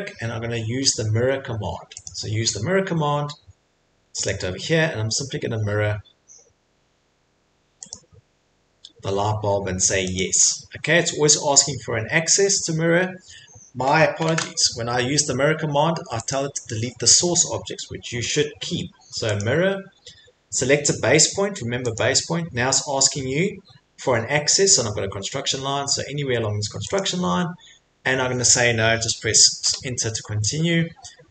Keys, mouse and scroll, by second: 2.1 click, 4.3 click, 7.9 click, 10.2 click, 14.3 ctrl+z, 16.3 click, 19.4 click, 21.9 click, 27.0 click, 29.6 Return.